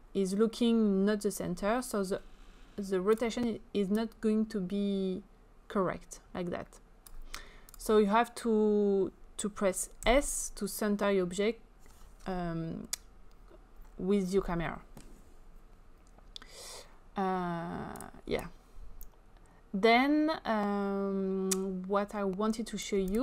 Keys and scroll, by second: 10.1 s.